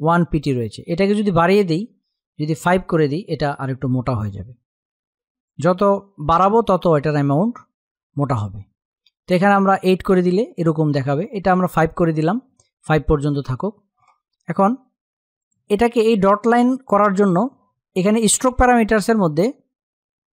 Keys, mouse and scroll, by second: 0.2 click, 5.0 click, 9.2 click, 15.0 click.